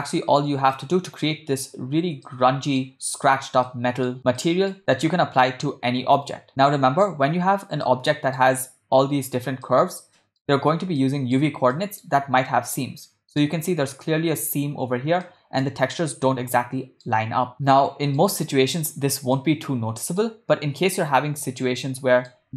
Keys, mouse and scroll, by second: 0.9-1.9 middle drag, 2.4-3.0 middle drag, 3.8-4.2 middle drag, 4.5 ctrl+middle click, 4.9-5.6 shift+middle drag, 6.5-7.3 ctrl+middle drag, 8.0 middle click, 9.8-10.6 middle drag, 11.2-11.6 shift+middle drag, 11.9-12.2 ctrl+middle drag, 12.9-13.9 ctrl+middle drag, 15.6-15.9 shift+middle drag, 16.8-17.4 shift+middle drag, 17.7-18.4 ctrl+middle drag, 19.6-20.6 middle drag, 22.2 middle click.